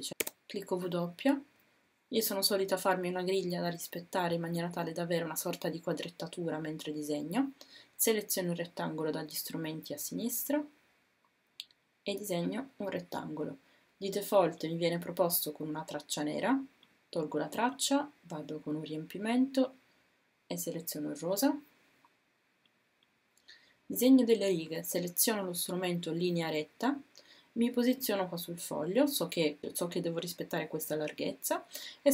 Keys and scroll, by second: 0.2 w.